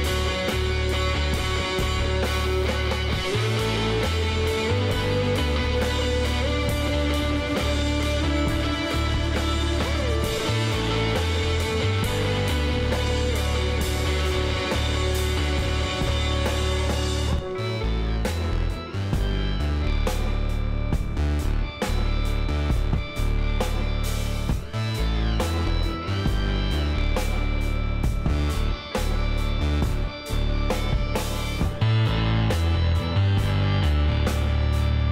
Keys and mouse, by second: 0.2-1.7 drag, 1.7-3.4 middle drag, 3.4 click, 4.3-5.8 middle drag, 9.9-11.9 middle drag, 11.9-13.6 drag, 14.6 a, 15.0 a, 15.7 w, 17.7-18.9 drag, 18.2 Tab, 19.9 a, 21.5 Tab, 26.6-30.7 middle drag, 30.7 click, 32.1 Tab, 33.5 a, 34.5 KP_Divide.